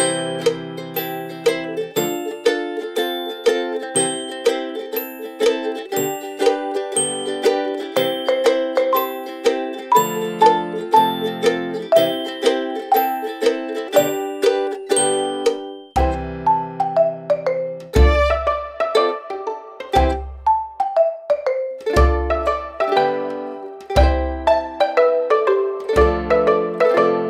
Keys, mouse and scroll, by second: 4.4 click, 6.0 click, 9.2 ctrl+z, 9.9 click, 18.6 click.